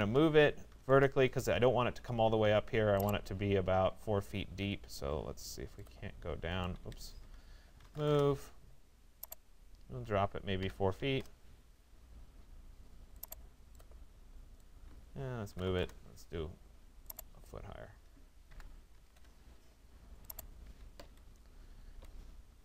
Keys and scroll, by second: 6.4 Escape, 8.1 Return, 10.6 4, 11.1 Return, 15.3 Return, 18.5 1, 19.1 Return, 21.0 Escape.